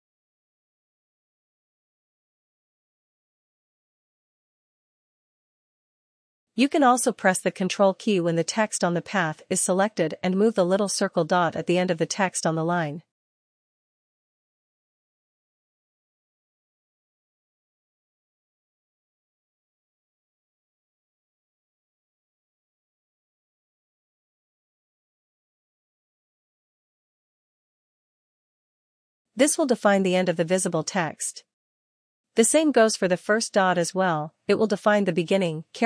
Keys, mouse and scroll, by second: 4.1-5.5 typing, 7.3 click, 7.4-8.6 scroll, 8.7 click, 8.8 click, 9.9 click, 10.0 click, 10.1 click, 10.2 click, 10.3 click, 10.5 click, 10.7 click, 10.8 click, 10.8 click, 11.0 click, 11.0 click, 11.7 click, 13.5-16.3 typing, 19.1 click, 19.3 click, 19.6 click, 22.9 click, 25.3 click, 30.6 click.